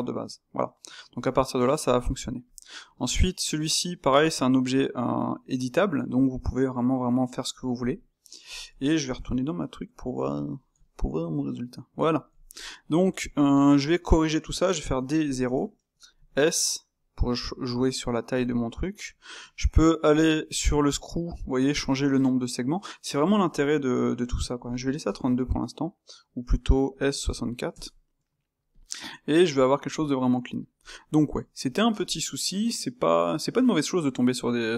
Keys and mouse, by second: 2.4-4.2 drag, 4.2 space, 9.0 KP_0, 10.3-13.8 middle drag, 13.8 space, 18.4-21.5 middle drag, 28.8-34.7 middle drag.